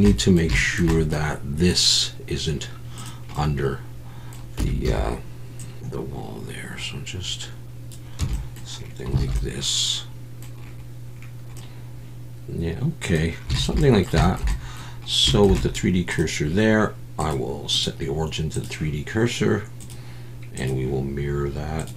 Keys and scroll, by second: 4.6 Tab, 4.9 a, 8.2 Tab, 9.2 alt+a.